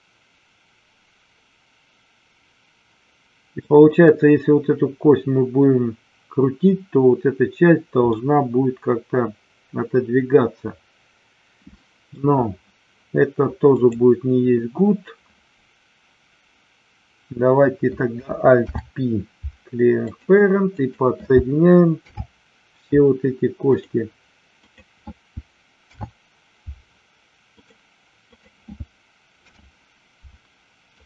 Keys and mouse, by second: 8.0-12.2 middle drag, 13.7 click, 18.6 alt+p, 22.0 alt+p, 24.6 click, 25.7 alt+p, 28.3 click, 29.4 alt+p.